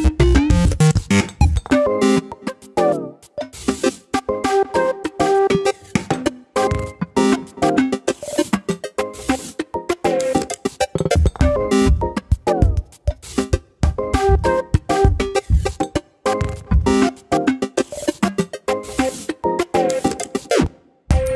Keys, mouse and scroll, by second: 0.0-0.5 scroll down 2, 0.5-2.2 middle drag, 2.2 scroll up 1, 2.5 middle click, 2.8 3, 3.2 click, 4.1 shift+click, 4.4 shift+click, 5.0 shift+click, 5.4 shift+click, 6.1-7.2 scroll down 1, 7.2-7.8 scroll down 1, 7.8-9.9 scroll up 2, 10.6-11.6 shift+middle drag, 11.6-12.2 scroll up 1, 14.2 shift+middle click, 14.5-15.2 scroll up 1, 15.2 e, 19.2 middle click, 19.9 s, 20.7 ctrl+r.